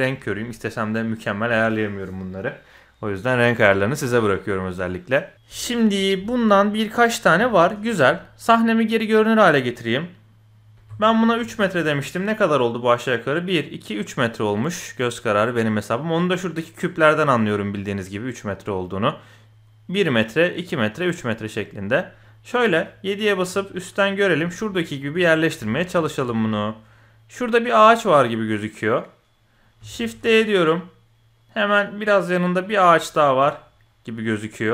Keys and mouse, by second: 0.5-1.3 middle drag, 4.1-5.1 middle drag, 5.6 shift+middle click, 6.3 shift+middle click, 7.5 shift+middle click, 9.0 click, 10.7 KP_7, 11.4 KP_1, 14.5 middle click, 15.4 middle click, 21.9-22.2 middle drag, 23.4 KP_7, 24.7 shift+middle click, 25.7 shift+middle click, 26.2 g, 30.0 shift+d, 33.2 shift+click.